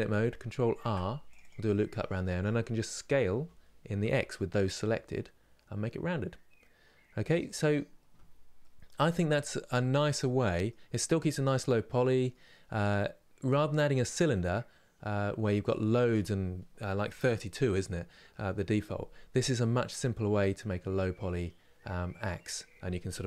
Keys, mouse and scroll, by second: 0.4 ctrl+r, 1.4-3.0 middle drag, 3.0 s, 8.3-12.6 middle drag, 12.6-13.1 scroll down 1, 13.1-23.2 middle drag.